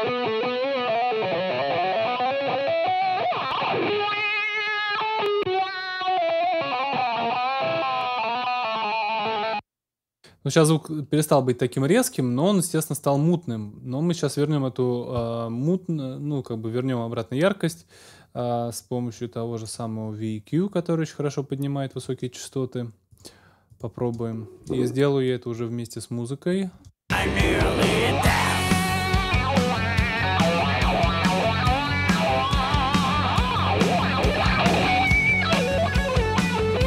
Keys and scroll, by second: 9.3 space, 9.8 super+space, 10.0 super+s, 24.0 space, 26.7 space.